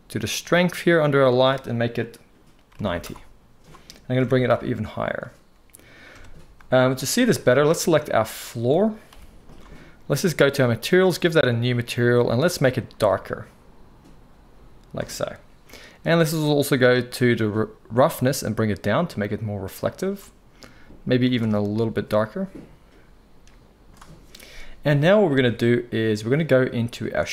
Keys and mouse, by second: 0.3 click, 0.3 middle click, 1.1-5.1 drag, 1.1-5.1 middle drag, 4.1 g, 6.1 KP_0, 7.8 click, 7.8 middle click, 9.1 g, 9.6-10.6 middle drag, 10.6 click, 10.8-11.4 middle drag, 11.4-12.4 drag, 12.4-18.1 middle drag, 18.1-21.3 drag, 21.3-27.3 middle drag, 25.3 alt+a.